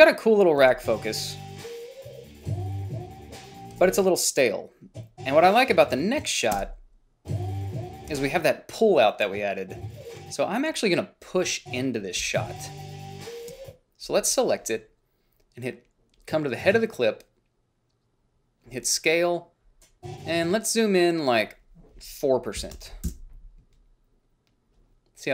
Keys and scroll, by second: 0.9 space, 4.0 space, 6.8 space, 8.4 space, 12.5 space, 13.7 space, 22.6-23.6 typing.